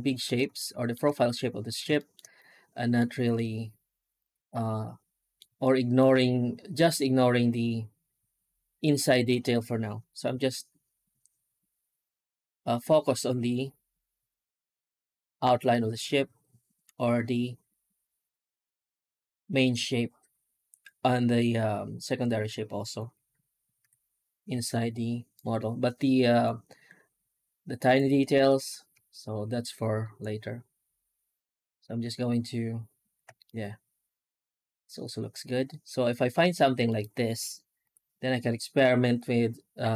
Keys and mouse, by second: 0.4-0.8 shift+middle drag, 1.8 shift+middle drag, 2.2-2.8 middle drag, 3.2-5.2 middle drag, 5.5-5.8 shift+middle drag, 23.6 F9, 33.3-36.4 middle drag, 36.7 middle click, 37.0 middle click, 37.7 F9.